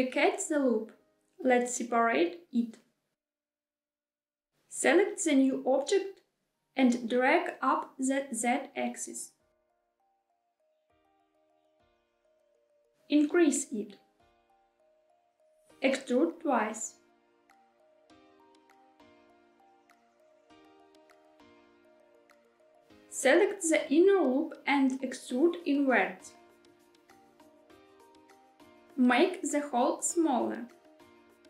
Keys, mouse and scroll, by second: 1.5 p, 3.9 Tab, 5.1 click, 6.7 Tab, 7.4 a, 8.6 g, 9.3 z, 12.1 click, 12.8 middle click, 13.3 s, 15.2 click, 15.7 e, 16.7 s, 18.9 click, 19.4 e, 19.8 s, 21.9 click, 23.6 click, 23.8 click, 25.1 e, 25.6 s, 28.1 click, 28.8 shift+middle click, 28.8 scroll up 1, 29.0 s.